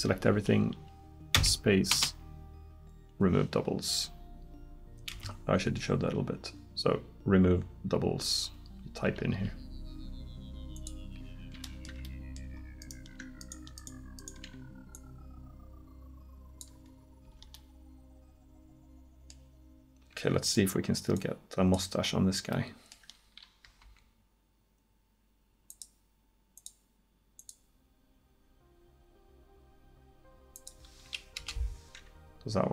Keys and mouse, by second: 1.4 space, 5.1 space, 11.7 middle click, 17.3 Tab, 20.2 Tab, 23.9 k.